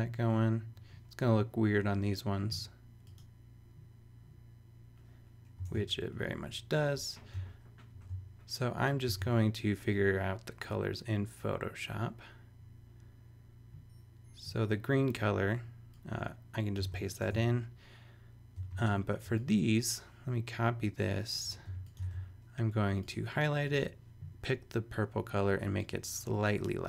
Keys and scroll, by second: 5.6 super+Tab, 7.9 shift+super+e, 9.2 super+Tab, 16.8 super+v, 17.2 super+Tab, 18.6 v, 19.2 alt+v, 21.7 alt+shift+t, 23.1 super+a.